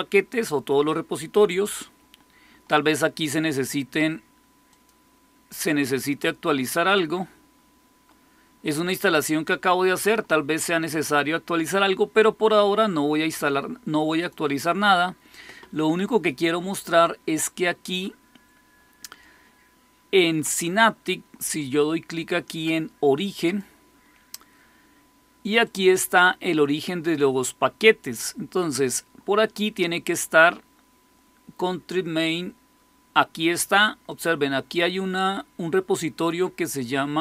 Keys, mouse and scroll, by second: 4.6 click, 14.1 click, 23.4 click, 25.6-28.1 drag, 34.0-37.2 drag.